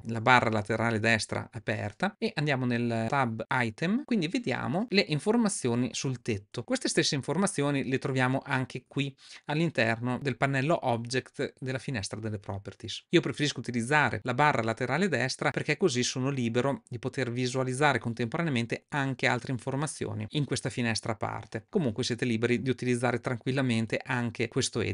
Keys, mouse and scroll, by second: 3.8 click, 8.6-9.2 drag, 17.7 click.